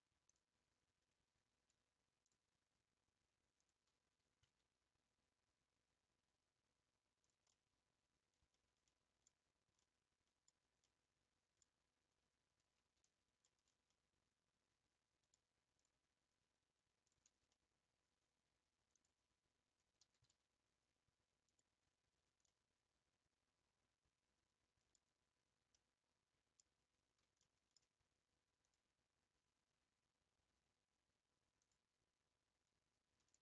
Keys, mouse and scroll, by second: 0.4 click, 2.3 click, 3.7 shift+click, 4.3 s, 7.5-9.3 middle drag, 9.3 Tab, 9.4-9.8 scroll down 3, 9.8-10.3 middle drag, 10.3-10.6 scroll down 2, 10.8-11.7 middle drag, 11.7-12.0 scroll up 4, 12.6 Tab, 13.1 scroll up 1, 13.4-16.0 shift+middle drag, 16.0 click, 17.5-19.1 middle drag, 19.1 click, 19.6 scroll up 1, 20.1 s, 21.9 scroll down 2, 22.1 Tab, 22.4-25.1 middle drag, 25.1-25.5 scroll up 3, 25.8-26.8 middle drag, 26.8 Tab, 27.4 shift+middle click, 27.8 scroll up 1, 28.7 click, 29.7-30.1 scroll up 2, 31.6-33.4 drag.